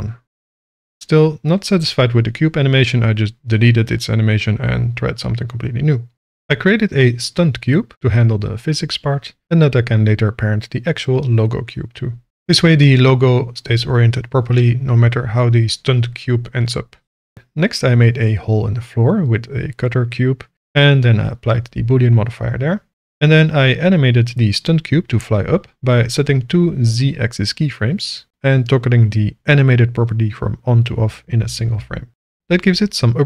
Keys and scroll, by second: 0.1 space.